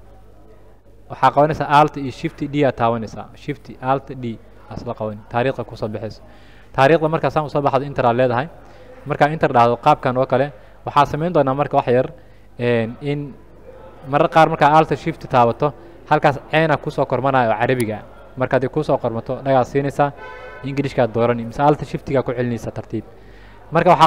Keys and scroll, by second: 2.6 alt+shift+d, 8.4 Return.